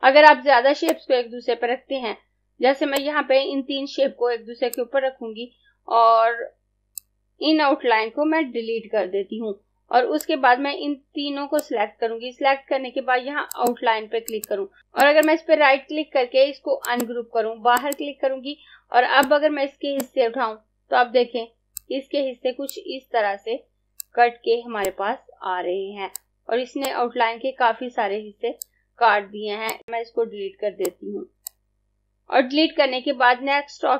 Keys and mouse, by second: 0.7 click, 8.7 Delete, 10.3 click, 15.1 right click, 16.8 click, 30.9 Delete, 31.4 click, 31.8 Delete.